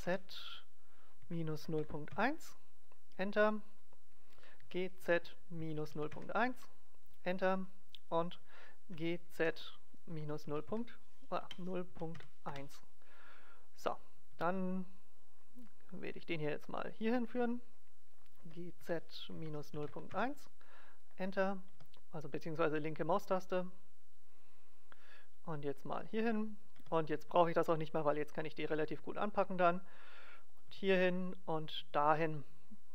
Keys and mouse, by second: 2.9-4.6 drag, 3.8-5.7 right drag, 4.6 g, 7.1 click, 8.1-10.0 middle drag, 8.9 g, 14.3 e, 17.3-19.2 drag, 18.4 g, 21.0-22.6 drag, 21.7 e, 26.0-27.7 drag, 26.8 e, 30.4-32.9 drag, 30.6 e.